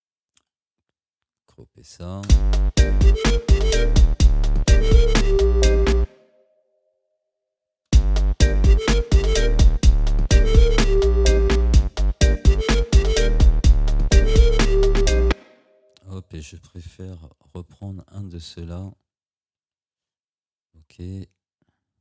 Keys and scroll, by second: 2.3 space, 6.0 space, 7.9 space, 15.3 space, 17.5 Delete, 19.8 ctrl+z.